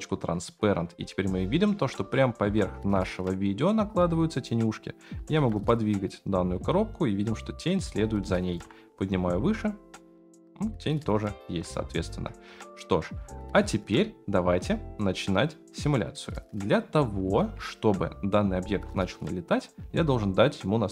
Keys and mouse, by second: 2.1-2.4 shift+middle drag, 4.5 click, 5.2 g, 8.4 g, 11.4 ctrl+z, 12.6-13.1 shift+middle drag.